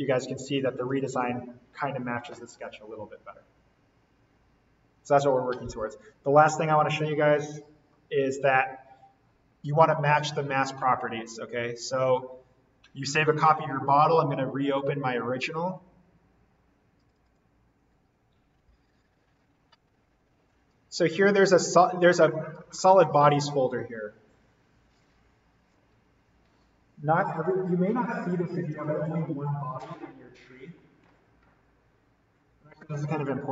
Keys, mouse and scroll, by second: 0.8 alt+v, 11.4 click, 17.0 click.